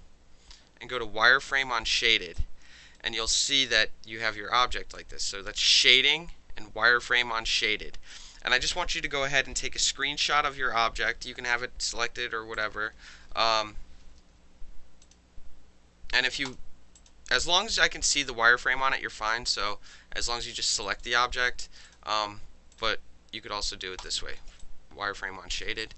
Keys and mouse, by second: 1.5 click, 1.6-2.4 middle drag, 2.4-3.0 alt+right drag, 3.0 alt+middle click, 3.2-5.0 alt+drag, 5.0-5.7 alt+middle drag, 5.7 alt+click, 5.8-8.1 alt+middle drag, 8.1 alt+click, 8.2-10.2 alt+middle drag, 11.8 click, 12.6 click, 15.0 click, 16.5 click, 17.0 click, 18.3-19.1 alt+drag, 19.1-20.8 alt+middle drag, 20.3 click, 20.8 alt+click, 21.0-21.9 alt+middle drag, 21.9 click, 21.9-24.0 middle drag, 22.7 click, 24.0 click, 24.1-24.6 middle drag, 24.6-25.6 alt+drag, 25.6 alt+middle drag, 25.8 alt+right click.